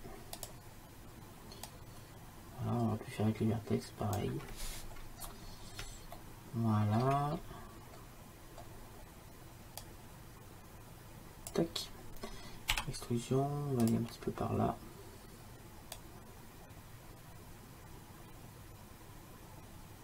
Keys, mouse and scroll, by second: 1.7-4.2 drag, 5.0-9.9 middle drag, 9.9-12.4 drag, 12.8 e, 16.1-20.0 drag.